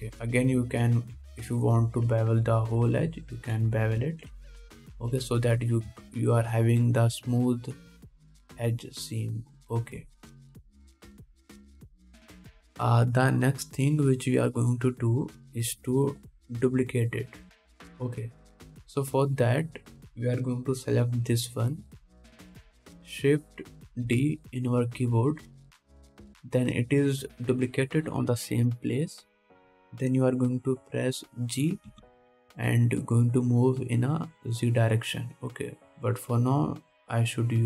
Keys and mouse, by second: 0.8 Tab, 1.2 alt+a, 1.7 1, 5.3 ctrl+Tab, 11.8-37.6 drag, 11.8 KP_1, 13.5-14.8 middle drag, 13.5 right click, 17.5-20.1 middle drag, 17.5-20.1 right drag, 25.3 shift+d, 33.1 g.